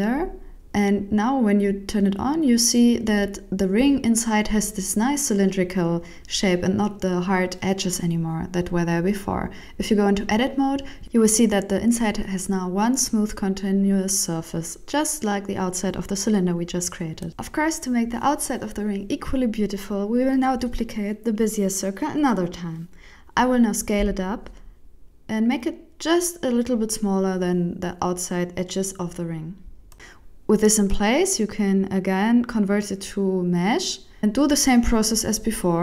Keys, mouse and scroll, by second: 0.4 click, 1.2 click, 1.6 middle click, 2.2 right click, 3.0 x, 3.5 middle click, 7.1 Tab, 7.4 middle click, 8.1 right click, 8.4 right click, 8.6 Tab, 9.0 alt+a, 9.9 ctrl+alt+shift+m, 10.8 middle click, 10.8 scroll up 1, 11.5 scroll up 4, 11.8 middle click, 14.4 scroll down 2, 14.7 middle click, 17.3-18.1 scroll up 2, 18.1 right click, 18.7 right click, 19.4 shift+middle click, 20.1 shift+d, 22.0 KP_1, 23.6 s, 28.4 middle click, 31.0 click, 32.9 middle click, 33.3 Tab, 34.2 a.